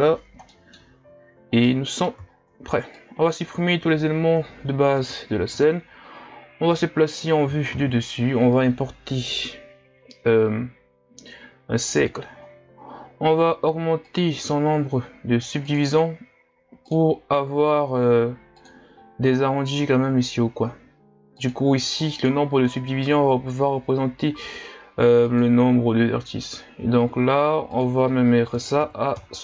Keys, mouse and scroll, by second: 0.5-1.2 middle drag, 1.2-1.6 scroll down 2, 1.6-2.3 middle drag, 2.3-3.0 shift+scroll up 2, 3.0-4.3 drag, 4.3 Delete, 5.6 KP_1, 6.7 KP_7, 7.7 shift+a, 12.4-14.1 scroll up 7, 14.1-25.1 drag, 25.2-26.5 drag, 26.5-27.7 scroll up 3, 27.7-29.4 drag.